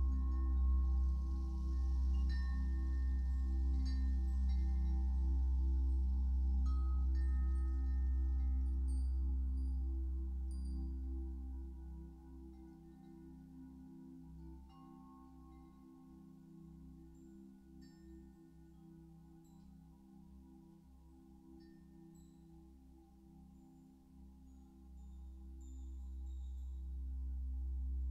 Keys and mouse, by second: 0.0 space, 0.9 ctrl+alt+click, 2.3 shift+click, 3.0 shift+click, 3.6-5.2 drag, 6.2-7.4 drag, 7.6 alt+click, 8.1 ctrl+alt+click, 11.0 click, 13.8-15.7 drag, 16.6-19.0 shift+drag, 21.5-23.5 drag, 24.5-28.1 shift+drag, 24.7-25.5 typing.